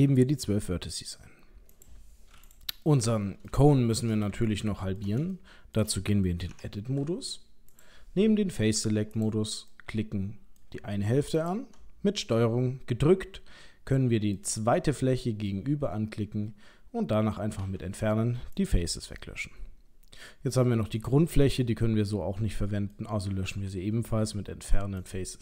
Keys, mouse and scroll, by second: 1.7 click, 2.5 click, 2.8 middle click, 3.7 shift+middle click, 4.4 ctrl+middle click, 5.4 shift+middle click, 6.5 Tab, 7.7 click, 9.1 click, 9.7 middle click, 11.4 ctrl+click, 12.3 middle click, 15.5 middle click, 17.6 Delete, 19.3 middle click, 21.0 click, 21.4 middle click, 23.3 Delete.